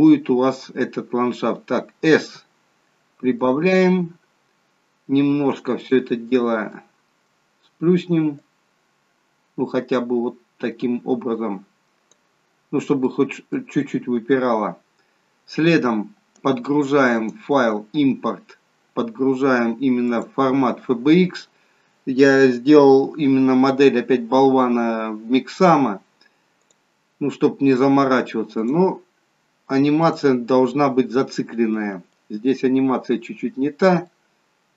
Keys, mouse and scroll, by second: 0.7-2.3 scroll up 4, 2.3 s, 5.9 click, 6.3 scroll down 2, 6.7 middle click, 8.4 click, 12.5-13.1 scroll up 3, 13.1 middle click, 14.8-15.3 scroll down 2, 15.3 scroll down 2, 17.0 click, 33.4 middle click, 33.5-33.9 scroll up 1, 33.9 middle click.